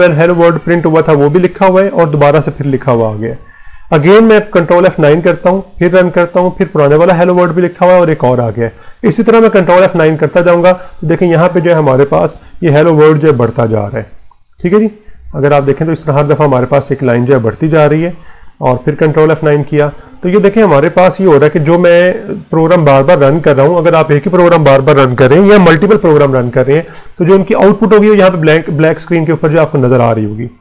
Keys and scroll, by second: 2.6 Return, 4.8 ctrl+F9, 8.1 Return, 9.1 ctrl+F9, 10.2 Return, 11.1 ctrl+F9, 12.3 Return, 13.0 ctrl+F9, 13.9 Return, 14.5 ctrl+F9, 15.5 Return, 16.2 ctrl+F9, 18.1 Return, 18.9 ctrl+F9, 19.7 Return, 20.4 ctrl+F9.